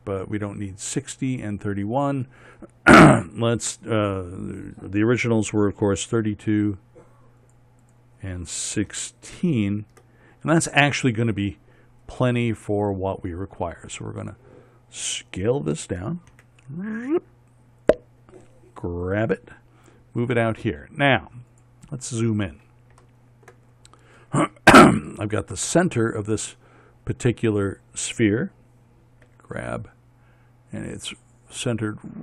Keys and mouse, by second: 13.2-15.6 middle drag, 17.0 s, 19.8 g, 25.3 middle click, 25.6 middle click, 29.9 g.